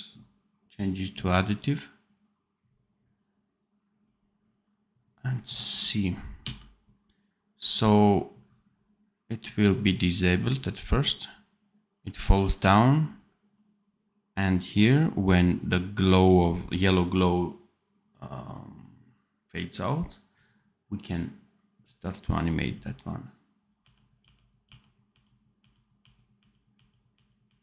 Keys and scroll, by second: 6.3 d, 23.7 r, 24.2 r, 25.1 r, 26.7 r, 27.4 r.